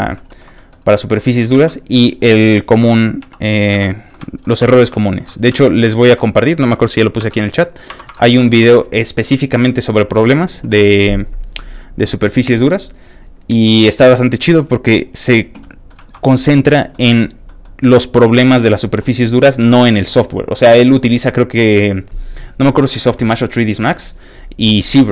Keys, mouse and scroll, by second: 0.3 shift+middle click, 0.5 shift+middle click, 0.9 shift+Tab, 1.1 middle click, 1.6 alt+a, 2.8 l, 4.1 alt+shift+middle click, 4.3 alt+middle click, 4.6 shift+Tab, 4.7 middle click, 5.0 shift+middle click, 5.5 alt+a, 5.7 middle click, 5.9 shift+middle click, 6.2-6.9 scroll up 2, 6.3 middle click, 7.2 alt+Tab, 14.9-15.6 scroll down 2, 15.6 middle click, 16.0 alt+shift+middle click, 16.6 shift+click, 16.9 shift+middle click, 17.3 scroll down 2, 17.4 shift+middle click, 19.8 middle click.